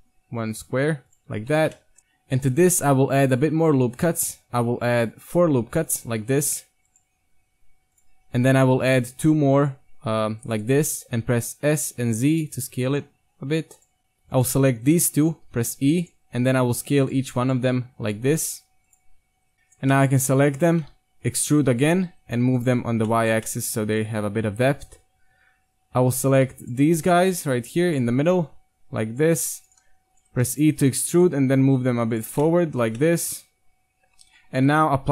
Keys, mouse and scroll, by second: 1.3 z, 1.5 Tab, 1.8 click, 2.0-3.0 right drag, 2.0 KP_1, 2.5 ctrl+r, 6.3 ctrl+Tab, 7.6 ctrl+Tab, 8.4 ctrl+r, 10.8 click, 11.3 s, 11.6 click, 14.0 ctrl+Tab, 14.3-16.0 right drag, 15.5 e, 16.5 s, 17.9 s, 19.5 right click, 19.9 middle click, 20.3-22.8 typing, 21.0 middle click, 23.1 middle click, 23.3 Tab, 23.5 middle drag, 23.8-24.1 middle drag, 24.4 Tab, 24.8 KP_1, 26.3-28.3 right drag, 30.4 e, 31.1 KP_3, 31.4 g, 32.3 Tab, 32.6 middle drag, 33.2 middle click, 33.4-33.7 middle drag, 33.8 middle drag, 34.2 Tab, 34.6 KP_1, 35.0-35.1 middle drag.